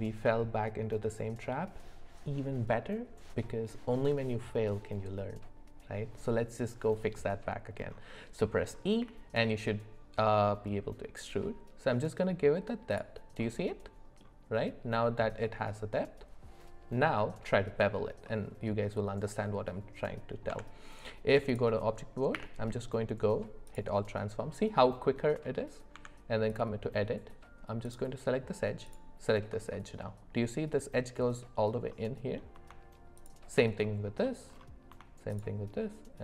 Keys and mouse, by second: 9.0 e, 13.4 middle click, 18.3-20.0 middle drag, 20.5 Tab, 22.3 q, 25.3 middle click, 25.9 Tab, 28.8 click, 29.7 middle click, 31.9 middle click, 33.8 middle click.